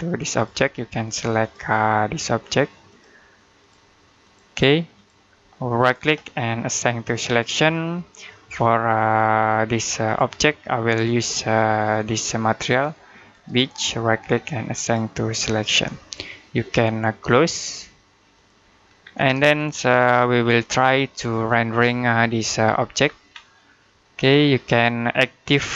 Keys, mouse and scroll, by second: 0.2 click, 5.8 right click, 7.0 click, 9.9 click, 13.2 right click, 14.6 click, 18.2 click, 18.9-19.2 scroll down 1, 19.3 middle click, 21.3-22.9 scroll up 1, 22.9 scroll down 1, 23.2-23.7 scroll up 1, 23.7 middle click.